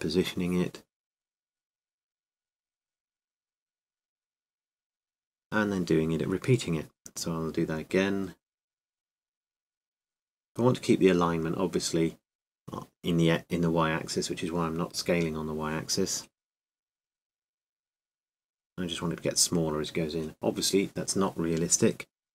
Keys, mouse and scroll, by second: 3.5 shift+d, 5.1 s, 8.5 s.